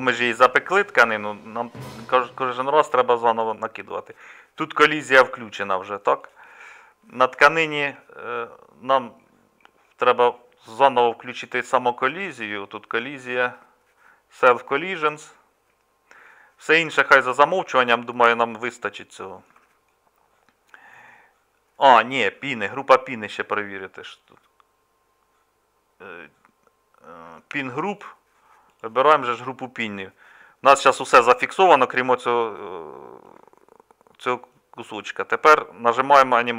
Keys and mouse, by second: 20.8-33.8 middle drag.